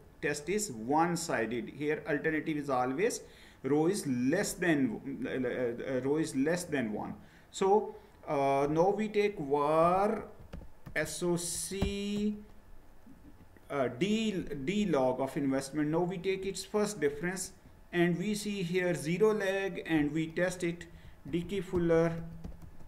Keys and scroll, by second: 9.8-12.2 typing, 17.4 Return, 20.6-22.8 typing.